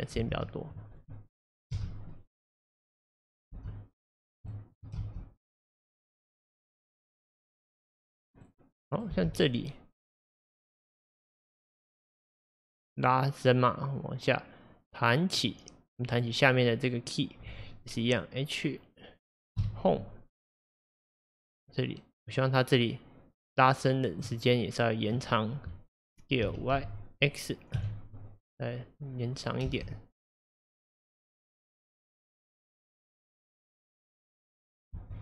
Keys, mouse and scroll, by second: 0.3 space, 1.1 s, 1.8 space, 3.6 space, 4.1-4.6 scroll down 1, 4.6 shift+middle click, 5.0 space, 8.5 click, 9.2 space, 9.5-12.5 drag, 16.2 click, 19.6 Home, 20.5-21.0 scroll down 1, 21.7-26.5 drag, 26.5 s, 29.7 space, 35.0 space.